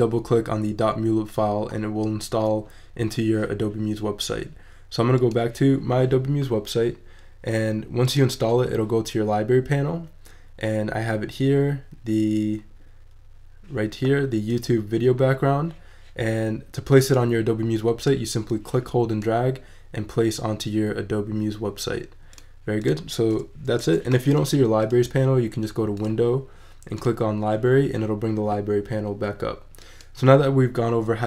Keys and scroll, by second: 23.8 Delete.